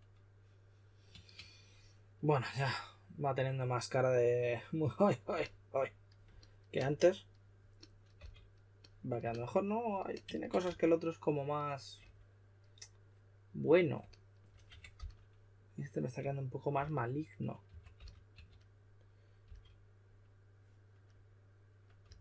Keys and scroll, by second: 8.1 s, 10.6 s, 14.6 typing, 16.7-19.4 typing, 22.0 typing.